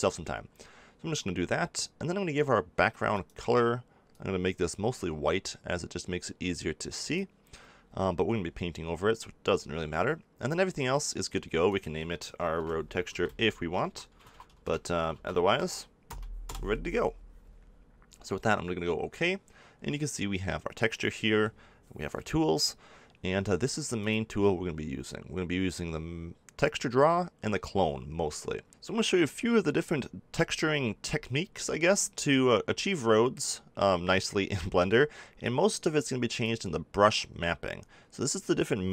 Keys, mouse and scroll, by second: 18.4-20.5 drag, 20.5-24.0 middle drag, 24.0-25.8 drag, 36.3-38.2 drag.